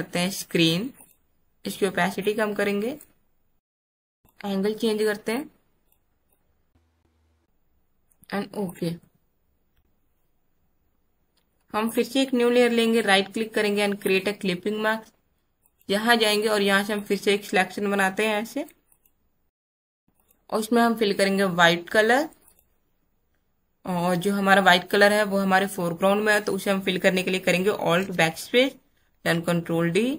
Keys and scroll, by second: 28.0 alt+BackSpace, 29.0 ctrl+d.